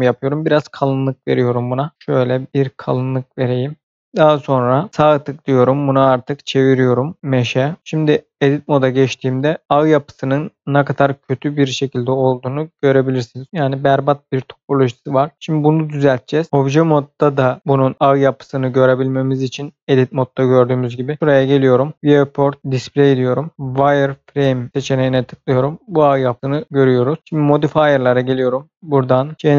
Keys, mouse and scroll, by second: 1.2 scroll up 1, 1.3 middle click, 1.9 click, 2.2 middle click, 3.8 click, 4.1 shift+middle click, 4.9 right click, 7.5 click, 8.4 Tab, 9.4 middle click, 9.6-10.0 scroll up 1, 10.0 middle click, 16.1 Tab, 20.8 click, 22.6 click, 23.0 scroll down 1, 24.7 click, 27.4 click, 28.5 click.